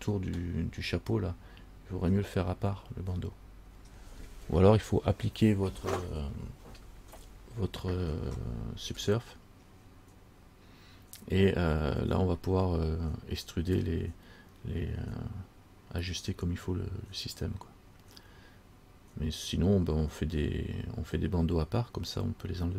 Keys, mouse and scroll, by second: 0.4 scroll up 1.